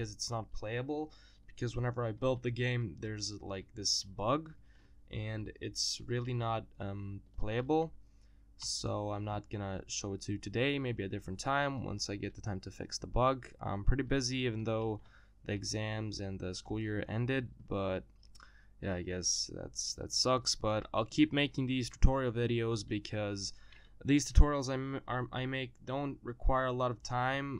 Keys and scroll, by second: 8.3 e.